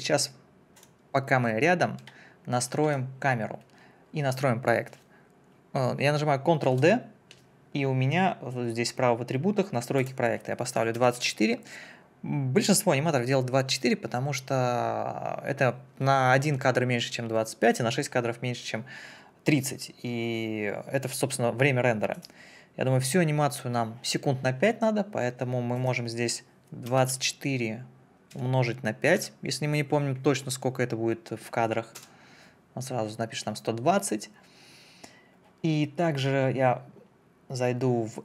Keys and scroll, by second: 6.6 ctrl+d, 11.0 2, 11.2 4, 26.9 2, 27.1 4, 28.3 KP_Multiply, 29.2 5, 32.0 Return.